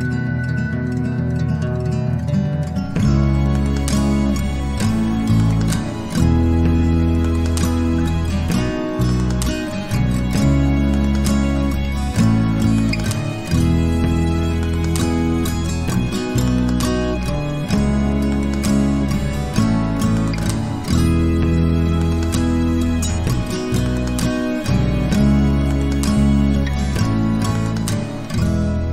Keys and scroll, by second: 10.2-14.4 typing, 14.8 ctrl+a, 16.9 Return, 17.4-20.4 typing, 22.3 ctrl+a.